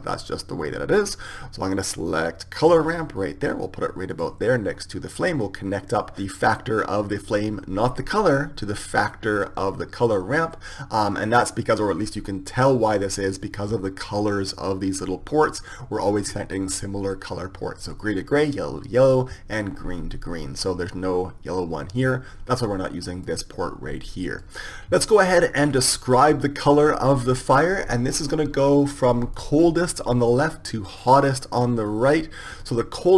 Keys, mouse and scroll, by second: 7.2-9.1 drag, 22.8-24.7 drag, 29.0-33.1 drag.